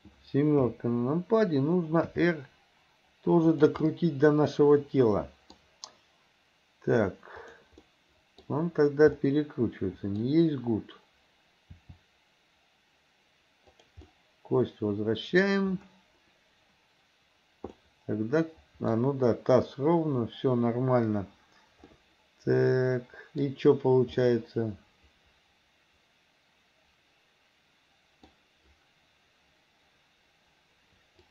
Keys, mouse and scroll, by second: 0.7 KP_7, 2.1 r, 3.9-5.6 middle drag, 5.6-7.0 scroll down 1, 7.0-7.4 scroll down 1, 7.4 click, 7.9-8.5 middle drag, 9.3-10.3 middle drag, 11.8 r, 14.1-15.5 middle drag, 17.8-19.0 middle drag, 22.0-23.5 middle drag, 24.3-28.3 middle drag.